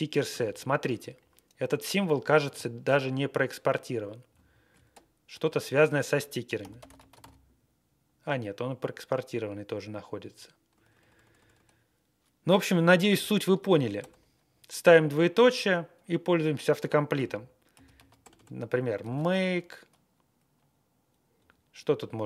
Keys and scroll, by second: 4.3 Left, 4.7 Right, 4.9-5.2 typing, 6.4-7.7 typing, 10.7-11.5 typing, 13.1 shift+;, 14.0 BackSpace, 17.5-19.8 typing, 21.5 Down, 21.8 Down, 22.0 Down.